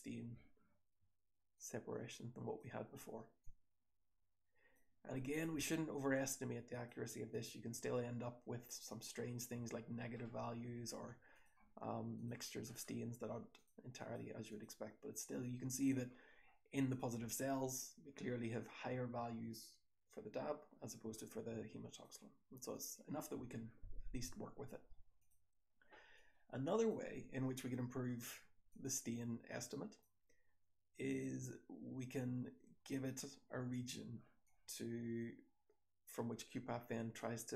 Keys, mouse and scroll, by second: 0.8-1.5 scroll up 1, 1.5 scroll up 1, 5.2 click, 8.0-8.7 scroll down 1, 8.7-9.4 scroll down 1, 8.8-9.4 drag, 9.4-10.0 scroll down 1, 10.0-11.2 scroll up 1, 11.2 click, 11.2-12.1 scroll up 1, 16.2-18.2 scroll down 3, 16.8 click, 18.2-19.5 scroll down 1, 19.5-20.8 scroll down 1, 20.8-21.8 scroll down 1, 21.8 scroll down 1, 25.1 click, 26.2-26.8 drag, 28.6-29.9 drag, 34.4-37.1 drag.